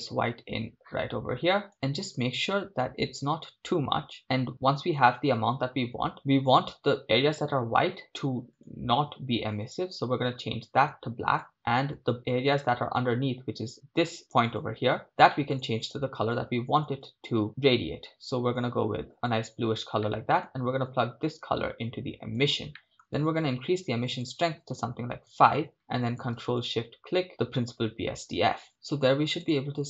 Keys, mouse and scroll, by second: 22.8 middle click, 29.6 click.